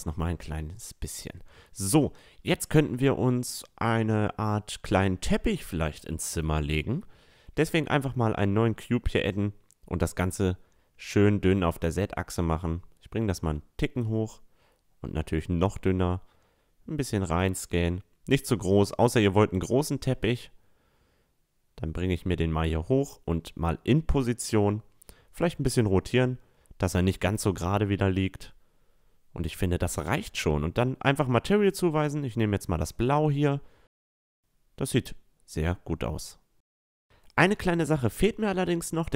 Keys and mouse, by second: 1.8-3.6 drag, 2.7 a, 3.5-3.9 middle drag, 6.2-8.0 middle drag, 8.0-9.7 drag, 8.8 s, 10.6 s, 12.2-14.1 drag, 13.0 s, 15.6 s, 18.4-20.2 drag, 22.4-25.6 drag, 24.5 r, 26.5-29.1 drag, 28.1 r, 29.6-31.3 drag, 31.7 a, 32.1-34.3 middle drag, 35.2-38.3 middle drag, 38.3 click, 38.8 middle click, 39.0-39.1 drag.